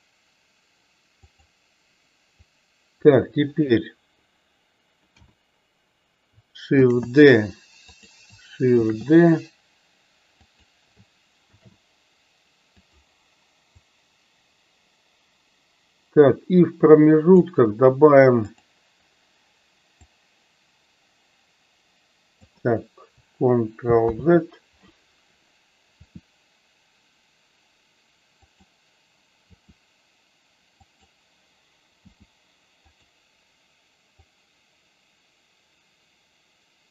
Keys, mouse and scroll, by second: 1.4 click, 2.5 click, 13.9-17.6 drag, 18.6 click, 20.1 click, 20.4-22.6 drag, 34.3-36.9 drag.